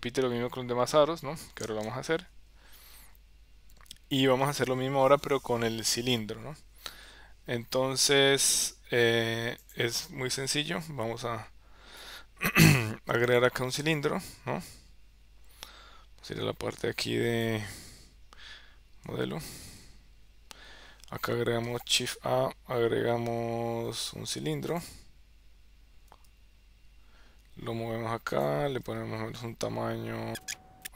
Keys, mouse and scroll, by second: 19.8 Tab, 21.8 shift+a, 26.4 g, 29.0 s, 30.4 g, 30.6 s.